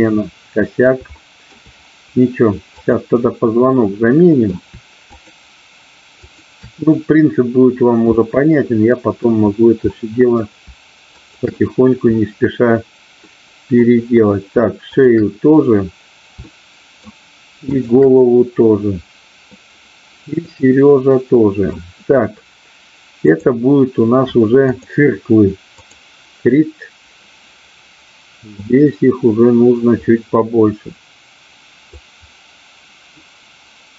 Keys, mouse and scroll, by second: 1.0 shift+middle click, 2.8-3.8 drag, 3.8 middle click, 6.3 shift+click, 8.1-9.1 middle drag, 9.9 middle click, 11.1-12.1 shift+drag, 13.3 middle click, 16.5 shift+middle click, 17.8 shift+click, 20.4-21.8 middle drag, 23.1-24.9 drag, 25.8 click, 28.5-33.5 drag.